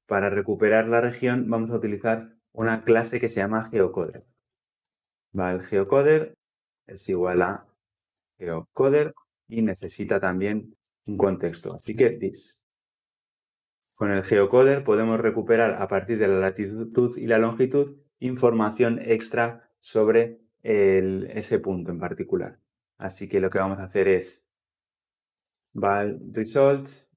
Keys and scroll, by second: 1.1 Tab, 5.6 Return, 12.8 ctrl+p.